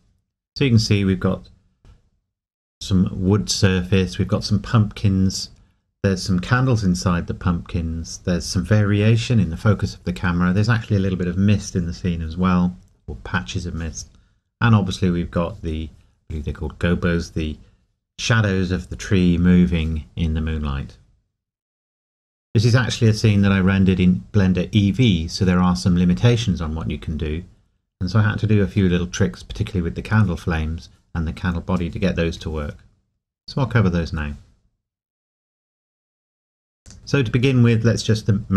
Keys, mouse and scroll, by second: 36.8 click.